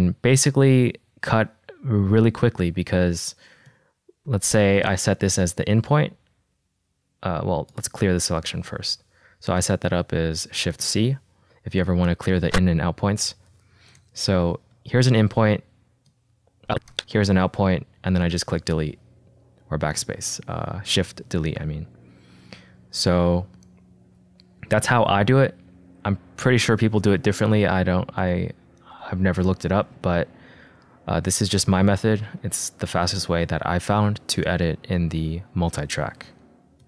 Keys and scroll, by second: 5.7 -, 15.5 -, 17.7 =, 18.6 BackSpace, 31.9 =, 32.3 BackSpace.